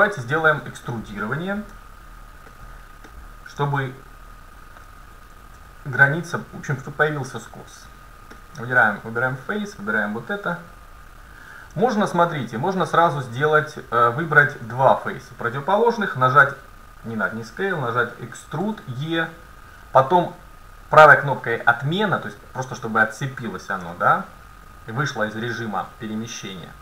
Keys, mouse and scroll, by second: 1.8 Tab, 2.7 middle click, 3.1-4.9 middle drag, 5.6 ctrl+Tab, 9.1-11.1 right drag, 10.6 KP_1, 11.9 middle click, 13.6-14.7 middle drag, 14.9-16.8 right drag, 16.4 s, 18.7 e, 24.0-25.8 middle drag.